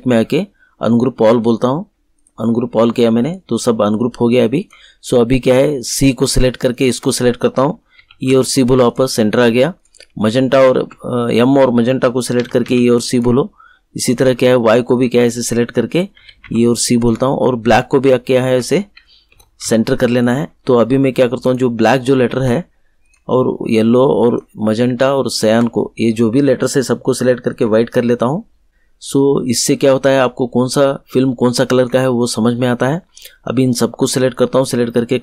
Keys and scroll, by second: 7.9 e, 8.2 c, 12.3 e, 12.6 c, 16.1 e, 16.4 c, 19.3 e, 19.6 c.